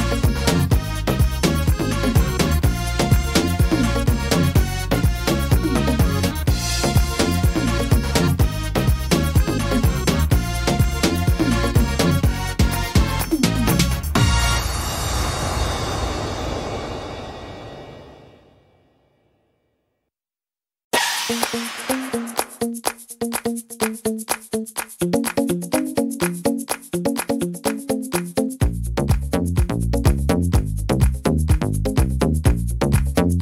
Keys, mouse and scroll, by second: 0.8 ctrl+r, 2.1 s, 4.1 middle click, 4.5-5.0 scroll down 2, 4.8 middle click, 6.0 ctrl+r, 7.3 middle click, 8.9 right click, 9.5 shift+right click, 10.5 click, 12.9 click, 13.9 middle click, 14.2-14.6 scroll down 7, 14.8 middle click, 15.2 scroll up 2, 15.7 middle click, 16.2-16.6 scroll up 3, 16.9 middle click, 17.4 right click, 18.7 l, 20.0 shift+d, 21.6 click, 23.0 middle click, 23.3 scroll down 2, 23.7 middle click, 24.8 middle click, 26.4 click, 27.9 middle click, 29.7 click, 31.0 middle click, 32.0 middle click, 32.7 scroll down 1.